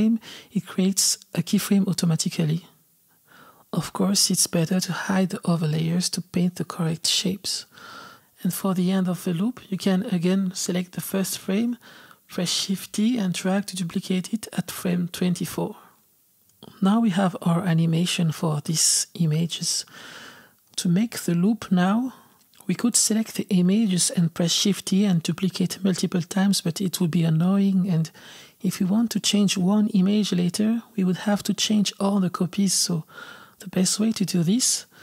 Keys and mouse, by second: 0.9 click, 4.1 click, 4.9 click, 5.2 shift+middle click, 5.7 click, 6.0 click, 6.4 shift+middle click, 7.1 click, 8.1 click, 8.4 click, 8.7 shift+middle click, 9.2 click, 9.5 click, 9.9 shift+middle click, 10.5 click, 12.2 click, 13.2 shift+d, 14.9-16.4 drag, 17.7 click, 18.4-20.2 drag, 20.3-21.6 drag, 24.0 shift+d, 25.3 g, 26.1 shift+d, 27.1 shift+d, 28.2 shift+d, 29.3-30.3 drag, 30.4-31.9 typing, 32.3-35.0 drag.